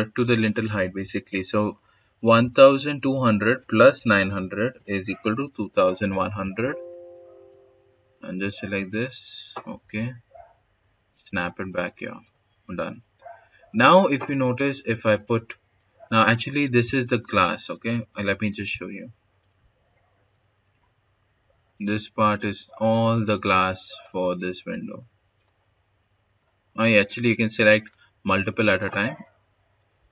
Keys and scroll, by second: 3.6-4.7 typing, 5.9 s, 9.6-10.3 typing.